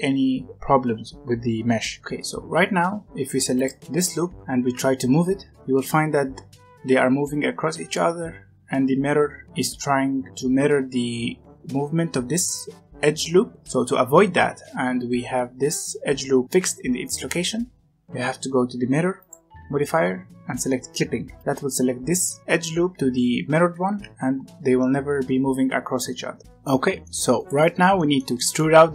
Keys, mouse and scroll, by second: 2.0 Tab, 3.5 alt+click, 4.5 g, 19.1 click, 21.3 click, 23.8 g, 26.4 middle click, 27.3 click, 27.6 Tab, 27.9 middle click, 28.7-28.9 scroll up 1.